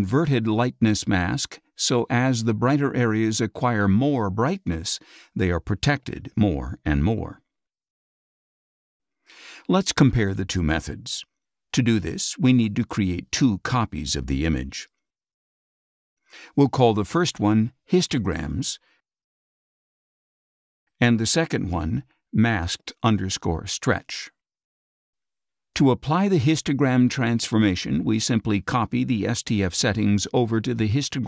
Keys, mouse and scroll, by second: 0.4 scroll down 2, 7.8 scroll up 2, 8.4 scroll up 2, 8.9 scroll up 2, 12.1-13.8 drag, 14.8 click, 16.9 click, 17.9-19.6 typing, 20.8 click, 21.8 click, 22.4-24.7 typing, 27.7 click, 31.0 click.